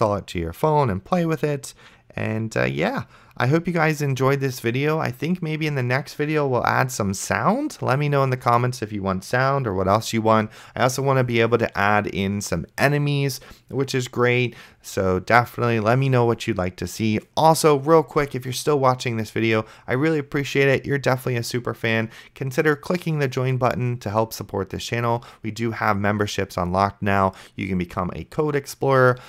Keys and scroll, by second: 0.0-1.7 typing, 4.0-5.6 typing, 6.7 a, 11.4 a, 11.7 space, 13.3-16.7 typing, 19.1-20.6 typing, 21.7 a, 26.4 a, 26.8 space, 28.3-29.2 typing.